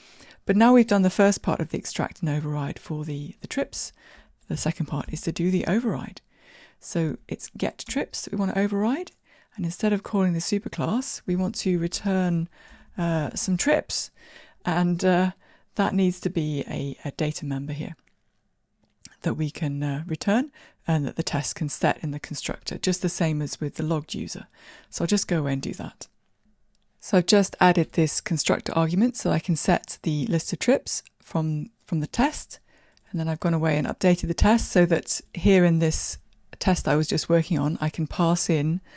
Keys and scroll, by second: 5.9 ctrl+o, 9.1 Down.